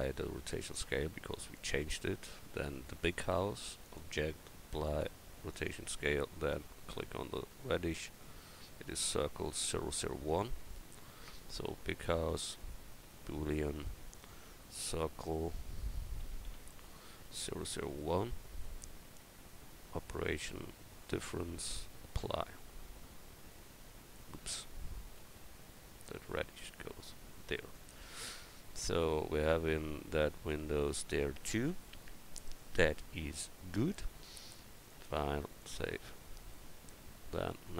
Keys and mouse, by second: 2.4-3.8 right drag, 6.3-6.9 drag, 25.2 ctrl+z, 28.1 middle click, 29.2 middle click, 34.9-37.5 drag, 37.5 KP_1.